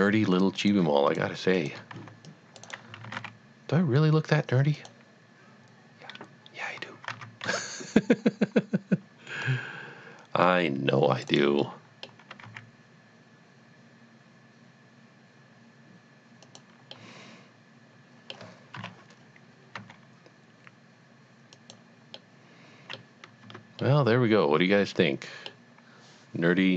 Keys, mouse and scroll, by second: 0.7 click, 1.1 shift+click, 1.6 shift+double click, 2.0 c, 2.3 click, 2.7 right click, 3.1 g, 3.2 z, 4.8 click, 7.6 c, 9.3-10.5 scroll up 2, 10.5 click, 11.3 right click, 11.7 middle click, 12.3 g, 12.8 x, 16.4 x, 16.4 click, 17.0 middle click, 17.3 middle click, 18.7 KP_7, 19.7 g, 21.5 click, 22.1 middle click, 22.6 middle click, 23.4 Tab, 23.8 middle click, 24.3 middle click, 25.7 middle click.